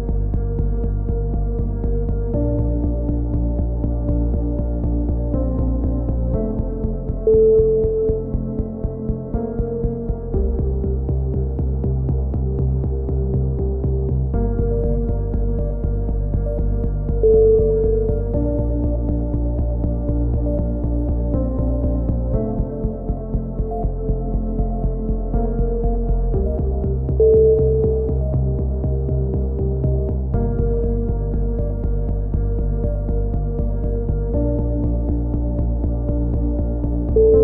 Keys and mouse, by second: 0.2-2.2 drag, 2.2-3.6 right drag, 3.2 click, 4.1-5.4 right drag, 4.1 shift+q, 5.4 shift+q, 5.4 a, 5.6 click, 6.7 click, 6.9-8.1 right drag, 7.9-9.1 drag, 7.9 middle click, 9.1 right click, 9.1 shift+q, 9.3 a, 9.7-11.6 drag, 9.9-11.0 middle drag, 9.9-11.0 right drag, 11.6 right click, 11.9 shift+q, 12.0 a, 12.5 click, 12.6-14.8 right drag, 13.1-14.8 drag, 14.9 right click, 15.5 shift+q, 15.7 click, 15.7 a, 16.3 right click, 16.7-17.8 drag, 17.2 right click, 17.8 shift+q, 18.1 click, 18.1 a, 18.6-19.6 right drag, 20.4-21.7 drag, 20.8 right click, 22.4 shift+q, 22.5 a, 22.6 click, 26.7-27.9 right drag, 27.9 z, 28.1 a, 28.4-31.0 right drag, 31.0 KP_3, 31.3 z, 31.6 z, 31.9-33.8 drag, 34.0-36.1 drag, 35.9-37.4 typing, 37.2 click.